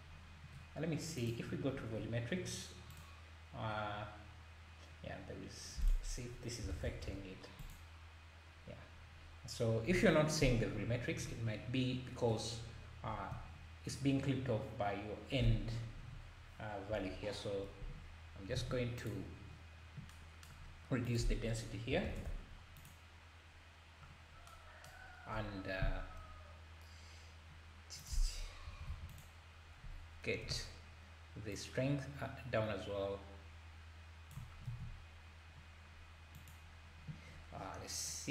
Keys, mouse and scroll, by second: 1.2 click, 1.7 scroll up 1, 1.9-2.3 scroll down 1, 2.9-3.6 drag, 3.6-5.8 scroll down 1, 5.8-6.8 drag, 6.8 KP_0, 11.4-12.2 scroll down 3, 12.5-13.0 scroll down 7, 16.9 KP_0, 17.5 scroll up 2, 18.6 alt+a, 19.0 click, 20.7-21.0 scroll up 1, 21.0-22.9 drag, 24.3 scroll down 2, 28.0-29.2 drag, 31.5-34.7 shift+drag, 34.7 alt+a, 36.3 click.